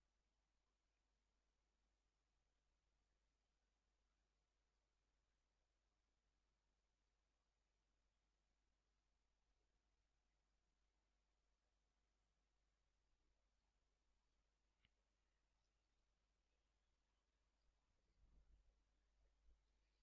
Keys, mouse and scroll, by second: 3.4-5.0 ctrl+drag, 6.0-7.7 ctrl+drag, 8.8 click, 11.6 click, 13.5 click, 14.2 right click, 15.7 click, 17.5 click, 18.0 click, 19.2 Delete, 19.7 click, 19.8 scroll up 1.